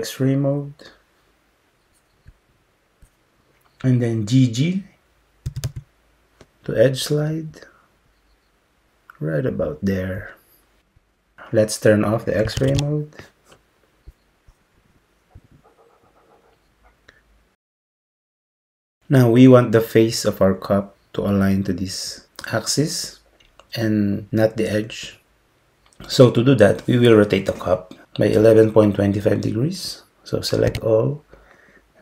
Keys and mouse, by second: 5.5 g, 12.6 alt+z, 30.7 a.